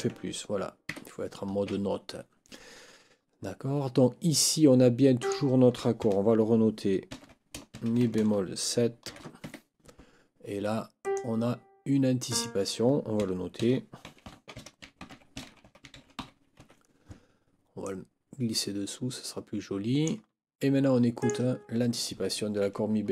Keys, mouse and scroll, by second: 0.9 Escape, 5.2 click, 7.1 ctrl+k, 7.6-8.5 typing, 9.4 shift+Escape, 11.0 click, 12.2 click, 13.6 ctrl+t, 14.0 ctrl+a, 14.2 ctrl+n, 14.6 ctrl+t, 14.8 ctrl+i, 15.0 ctrl+c, 15.1 ctrl+i, 15.1-16.7 typing, 17.8-20.2 drag, 21.2 click.